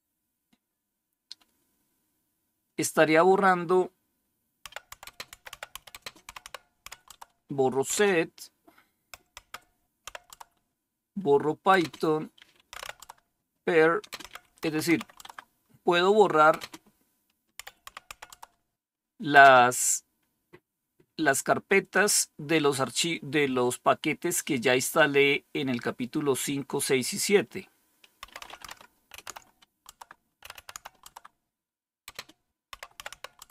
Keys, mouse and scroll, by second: 4.3-10.3 typing, 11.6-13.3 typing, 14.5-15.1 typing, 16.5 typing, 17.8-18.2 typing, 27.9-29.3 typing, 29.8 Tab, 30.3-33.5 typing.